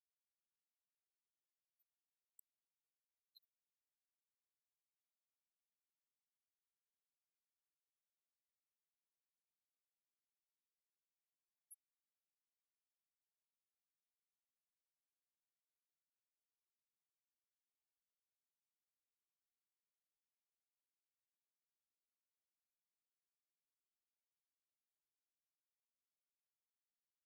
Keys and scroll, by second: 0.4 ctrl+Right, 0.9 ctrl+Down, 1.5 ctrl+Left, 2.5 ctrl+Down, 16.6 Home, 23.3 Left.